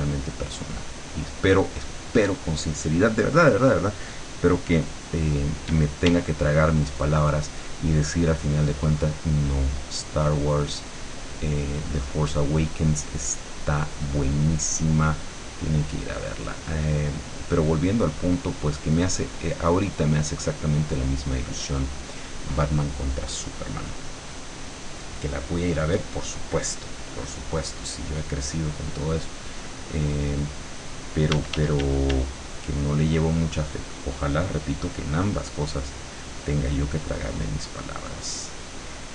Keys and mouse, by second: 1.1 click, 2.3 click, 5.7 d, 8.9-10.6 drag, 10.9-12.8 drag, 13.0-14.7 drag, 15.0-17.0 drag, 19.3 click, 19.7 click, 20.3 click, 21.3 click, 28.3 click, 29.5 click, 30.4 click, 31.4 d, 32.4-35.5 drag, 35.9-39.0 drag.